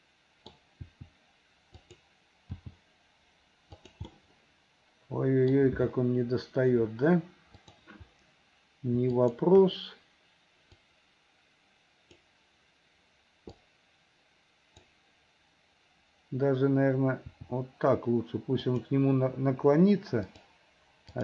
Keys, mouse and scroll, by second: 0.9 r, 2.5 g, 4.1 middle click, 4.2 scroll up 1, 4.2-5.5 middle drag, 5.5-5.9 scroll down 1, 7.6 click, 9.1 shift+click, 11.0-12.3 drag, 13.7-14.9 drag, 17.3 r, 20.2 click, 21.1 click.